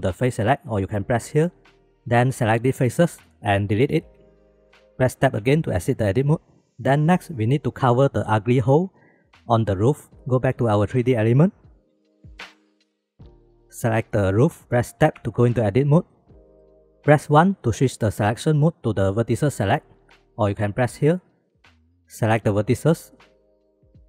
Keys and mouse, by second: 3.8 x, 5.4 Tab, 6.6 shift+b, 8.0 shift+middle click, 10.6 shift+middle drag, 11.2 shift+b, 15.2 Tab, 16.1 middle click, 16.7 shift+middle click, 17.0 3, 17.3 1, 23.7-24.0 shift+drag.